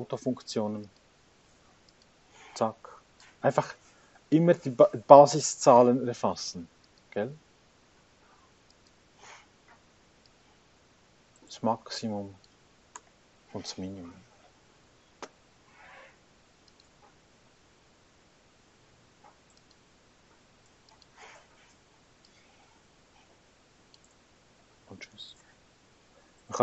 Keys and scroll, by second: 5.2 Return, 13.1 Return, 18.8 Escape, 24.6 Return.